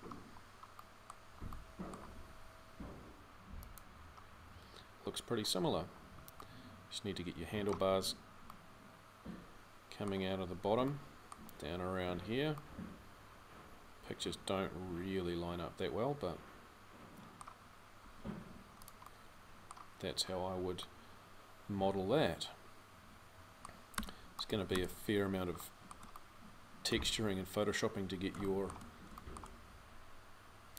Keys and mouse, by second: 1.9 g, 8.3 middle drag, 17.8 g, 23.0 click, 23.8 Tab, 24.5 Tab, 28.4 middle click, 28.6-30.7 drag.